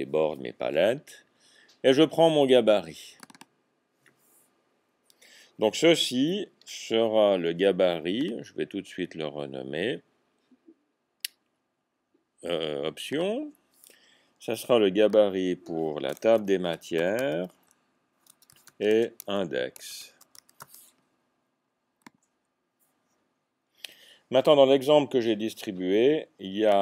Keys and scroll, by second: 16.3-17.3 typing, 18.6 typing, 20.6 typing.